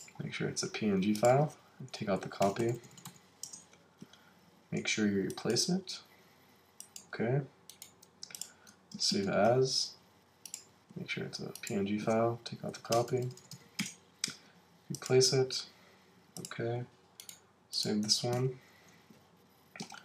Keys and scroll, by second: 2.0 Right, 3.4 Return, 9.1 shift+super+s, 12.6 Right, 13.8 Return, 18.3 super+s.